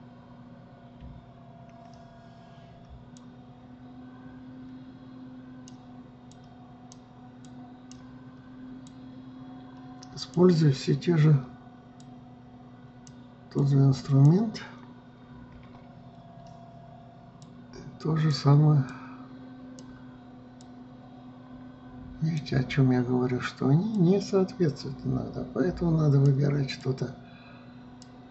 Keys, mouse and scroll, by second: 1.6 KP_3, 3.7-6.8 drag, 7.0-16.1 drag, 16.1 KP_1, 18.0-24.3 drag, 24.5-28.3 drag.